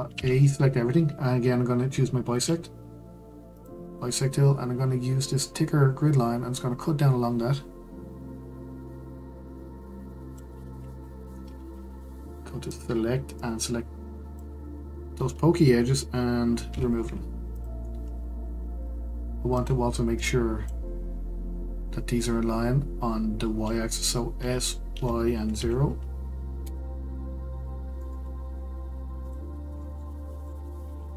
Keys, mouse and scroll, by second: 0.1 a, 3.5-6.7 drag, 12.7 click, 16.7 x, 19.5 click, 22.0-23.5 scroll up 1, 24.4 s, 27.8 scroll up 3, 28.0-29.2 middle drag, 29.2 click, 29.5-29.8 scroll down 2, 29.8 middle click, 30.3 click, 30.6-31.1 scroll up 1.